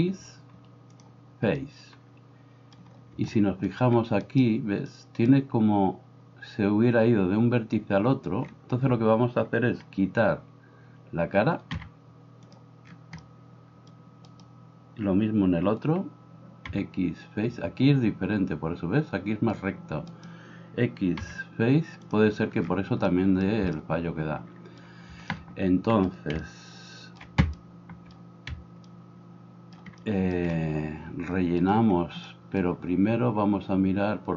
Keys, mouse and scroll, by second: 4.3-6.4 right drag, 11.8 x, 14.2 right click, 20.2-22.2 right drag, 29.5 shift+middle click, 30.0 shift+click, 30.5-32.5 right drag, 32.5-34.3 drag.